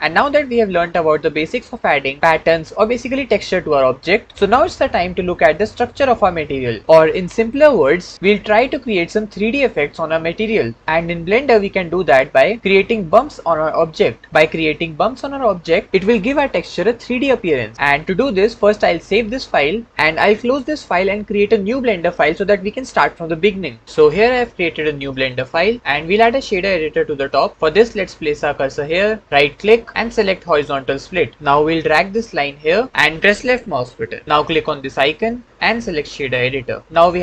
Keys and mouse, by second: 19.4 ctrl+s, 29.4-32.9 drag, 35.0-36.0 drag.